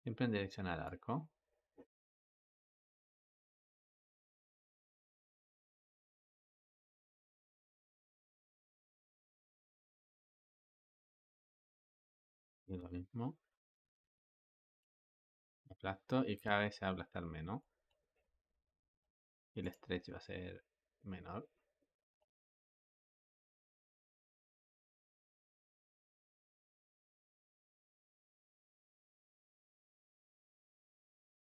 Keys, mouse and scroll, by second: 0.7-3.4 drag, 3.7 g, 5.2 click, 5.6 g, 6.9-9.9 drag, 15.5 g, 18.5-19.6 drag, 19.8 g, 22.5 click, 22.7 g, 24.0 click, 24.4 g, 27.6 click, 27.9 g, 29.7-31.5 drag.